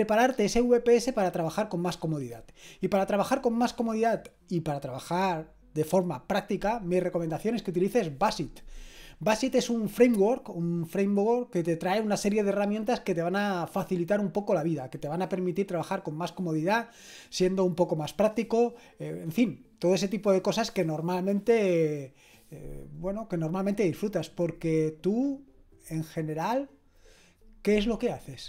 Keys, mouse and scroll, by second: 28.3 click.